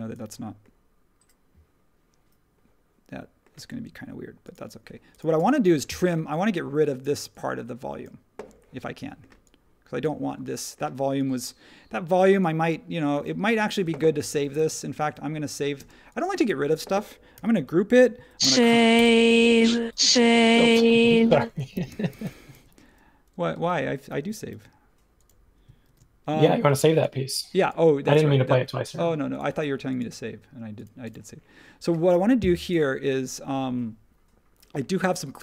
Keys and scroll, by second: 3.5 space, 6.6 e, 13.5 super+z, 13.8 super+z, 14.2 super+z, 15.7 space, 17.3 super+g, 18.4 super+c, 18.9 BackSpace, 21.3-22.2 typing, 23.5 Return, 23.5-24.5 typing, 25.8 shift+v.